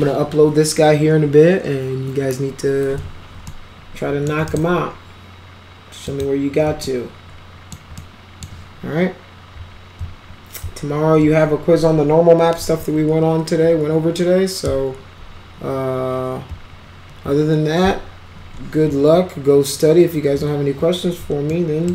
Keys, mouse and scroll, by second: 3.5 alt+middle click, 4.5 right click, 6.0 click, 6.8 alt+middle click, 8.0 alt+middle click, 21.5-21.9 alt+middle drag.